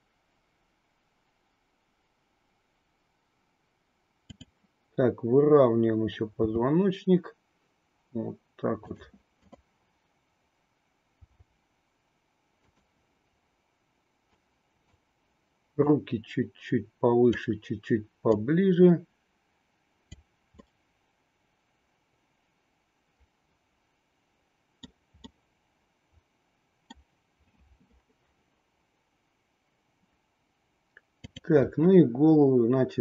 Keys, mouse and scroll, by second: 4.3-5.8 drag, 6.3 r, 9.3-10.7 drag, 11.2 r, 14.4 click, 15.8-17.4 drag, 18.2-20.3 drag, 20.6-24.9 middle drag, 25.3-26.9 middle drag, 31.2-32.6 drag.